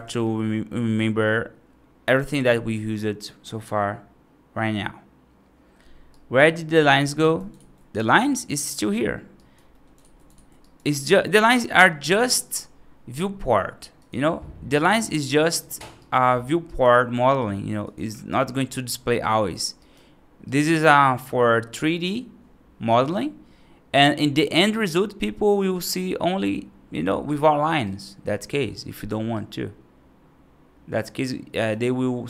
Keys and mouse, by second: 6.0 right drag, 6.7 alt+z, 7.1 right drag, 7.4 alt+x, 7.8 right drag, 8.2 right drag, 9.3 right drag, 9.6 middle drag, 9.9 alt+x, 10.3 alt+x, 10.5 right drag, 10.9 middle drag, 13.8-14.6 drag, 14.6 right click, 14.9 alt+x, 15.3 right drag, 15.8 right drag, 16.5 right drag, 18.8 right drag, 19.6 right drag, 20.3 right drag, 24.6 right click, 25.6 click, 27.1 right drag, 27.7 right drag, 28.8 right drag, 29.2-31.5 right drag.